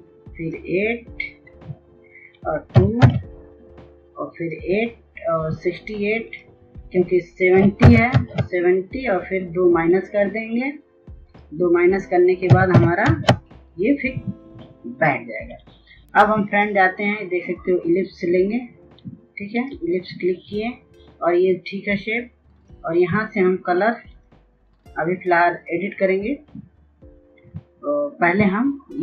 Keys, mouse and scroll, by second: 2.1 KP_2, 3.8 click, 7.0 KP_7, 7.2 KP_0, 8.0 KP_0, 9.4 click, 12.0 KP_6, 12.1 KP_8, 17.1-29.0 drag.